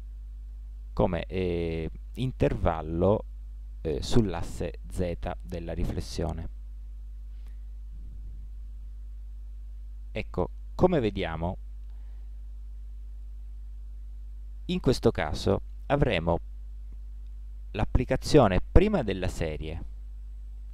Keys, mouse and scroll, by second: 5.7-7.9 middle drag, 7.9 KP_1.